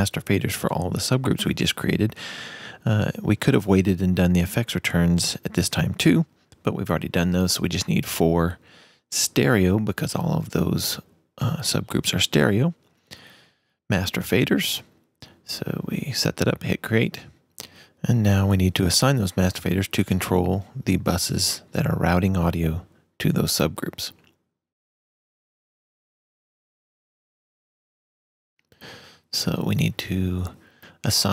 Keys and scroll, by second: 3.6 shift+super+n, 5.8 4.